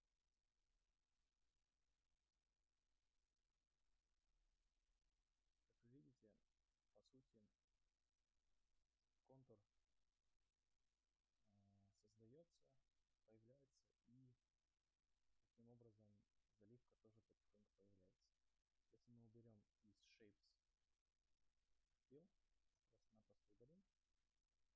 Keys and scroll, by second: 23.1 Delete.